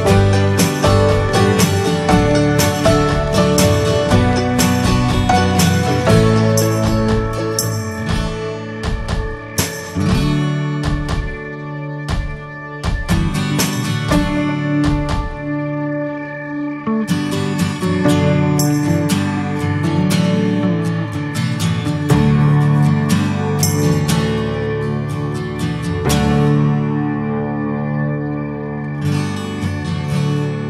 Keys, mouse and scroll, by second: 0.0 Tab, 0.1 click, 0.4 ctrl+a, 0.9 Tab, 1.8 3, 2.0 click, 2.9 click, 3.9 2, 4.0 click, 4.8 alt+shift+click, 5.2 s, 6.0 click, 7.0 ctrl+b, 9.1 s, 10.8 ctrl+b, 15.2 ctrl+b, 21.2 Tab, 21.6 middle click, 21.9 Tab, 22.5 3, 22.6 click, 23.0 alt+middle click, 24.5 s, 25.2 shift+middle click, 25.6 s, 26.3 middle click, 27.3 shift+middle click, 27.9 click, 28.7 shift+middle click, 29.2 e.